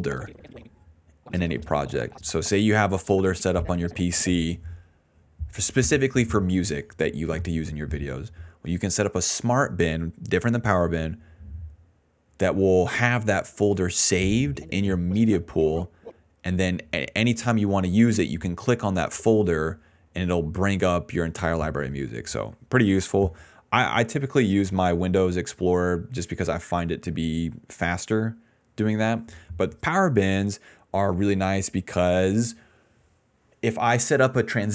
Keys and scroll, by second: 0.8 s, 4.7 a, 6.8-8.7 typing, 10.9 a, 13.6 d, 14.4 space, 15.1 d, 15.8 space, 17.9 a, 21.9 s.